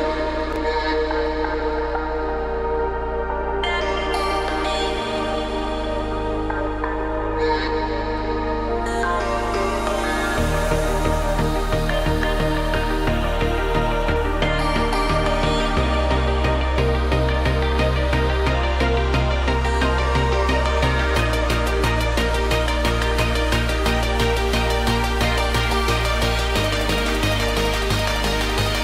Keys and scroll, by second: 5.8 ctrl+t.